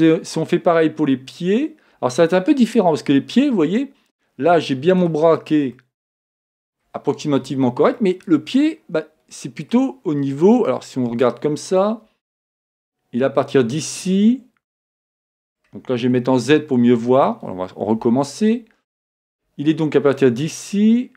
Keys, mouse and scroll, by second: 2.1 middle click, 2.1 scroll up 1, 2.4-3.5 middle drag, 2.4-3.5 scroll down 2, 3.5-4.2 scroll down 1, 4.2-7.7 middle drag, 8.0-9.9 middle drag, 14.0-16.0 middle drag, 16.2 z.